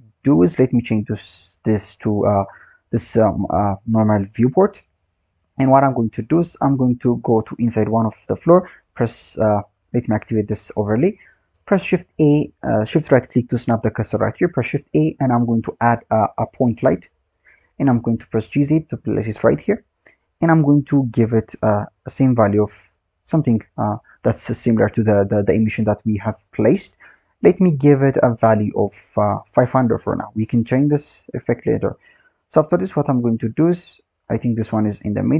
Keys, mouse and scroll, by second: 1.0 click, 3.5 click, 4.3-4.9 scroll down 5, 4.9 click, 5.9-8.8 scroll up 9, 8.8 shift+right click, 10.4 click, 11.7 shift+a, 13.0 shift+right click, 14.4 shift+a, 17.8 g, 21.0 click, 27.9-29.9 drag, 29.9 KP_0, 30.0 KP_0, 32.8 click, 33.4-34.1 scroll down 7, 34.1-35.3 scroll up 5.